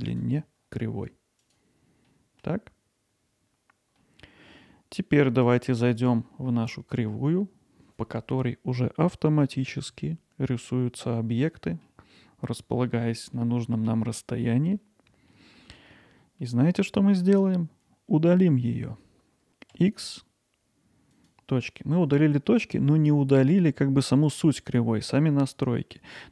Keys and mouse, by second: 0.1 click, 2.1 middle click, 4.0 middle drag, 11.7 middle click, 13.3-14.8 middle drag, 15.3 middle drag, 15.9-16.4 middle drag, 22.5-23.5 middle drag, 26.0 middle click.